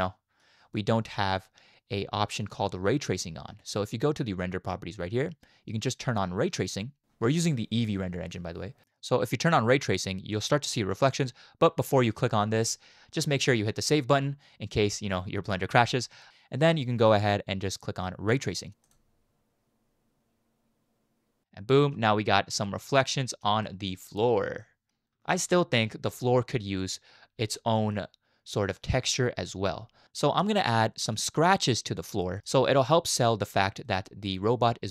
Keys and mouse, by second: 0.0-0.4 shift+middle drag, 2.4 click, 13.7-16.2 drag, 20.9 click, 21.4-22.4 middle drag, 22.6 shift+middle click, 23.6-24.0 middle drag, 24.6 middle drag, 24.9 click, 25.1 space, 26.2 space, 27.6 shift+middle drag, 27.9-28.8 middle drag, 30.5 click, 30.5 middle click, 30.5 right click, 32.4 middle click, 33.9 middle drag.